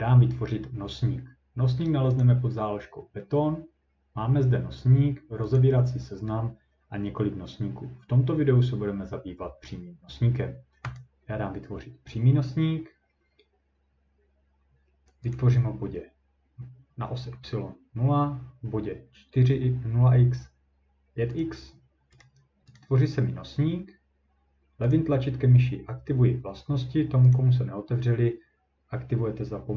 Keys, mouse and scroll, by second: 2.0 scroll down 6, 2.2 click, 5.6 click, 11.0 click, 15.3 click, 21.4 click, 22.2 right click, 22.8 click, 24.9 click, 27.4 click.